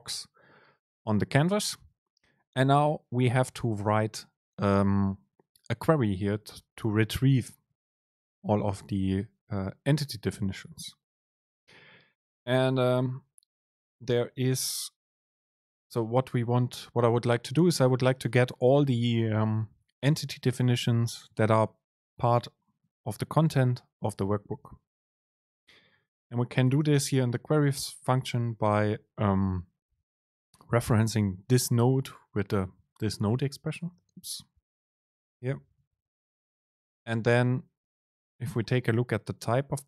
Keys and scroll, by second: 12.8 super+space, 27.8 super+space, 35.6 Up, 37.5 End.